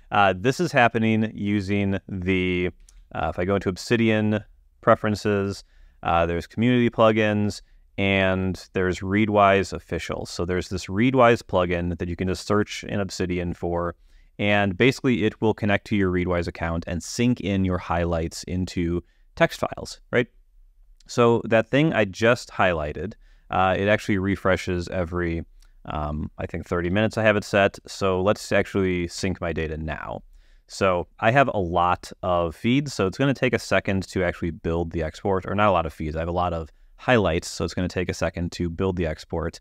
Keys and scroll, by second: 3.1 super+,, 27.1 super+p, 29.4 Return.